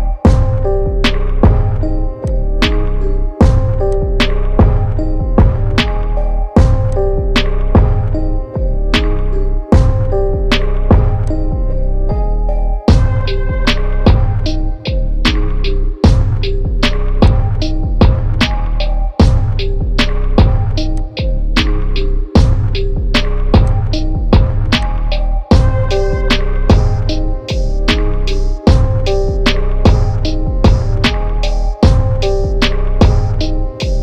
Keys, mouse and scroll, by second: 0.3 click, 3.9 alt+click, 8.9 ctrl+z, 11.3-14.6 drag, 14.6 ctrl+t, 17.3 click.